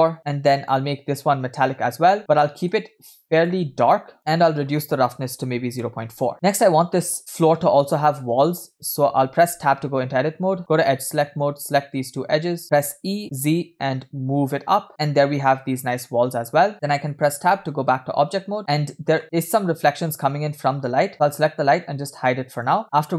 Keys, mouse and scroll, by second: 0.2 o, 0.7-2.2 drag, 2.4 middle click, 3.4 click, 4.4-6.2 drag, 9.6 Tab, 11.0 click, 11.6 click, 12.7 click, 12.8 e, 16.3 scroll down 2, 16.6 scroll up 1, 20.5-21.1 scroll down 4, 21.1 click, 22.2 click, 22.8 shift+middle click, 22.8 scroll up 1.